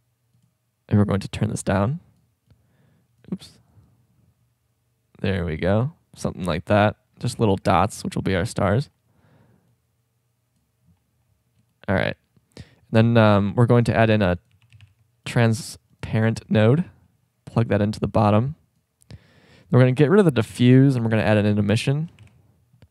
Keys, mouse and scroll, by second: 1.6-1.9 drag, 2.6-3.1 drag, 7.3 middle click, 7.5 shift+scroll up 1, 13.9 shift+a, 18.0-19.4 drag, 20.5 Delete, 21.1 shift+a.